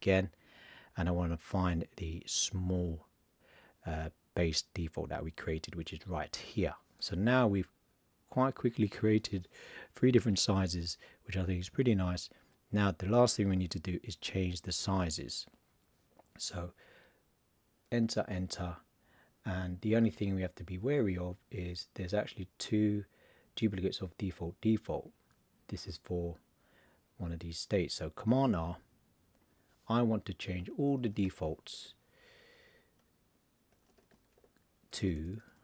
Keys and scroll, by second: 28.3 super+r, 30.7 shift+d, 33.7 shift+d.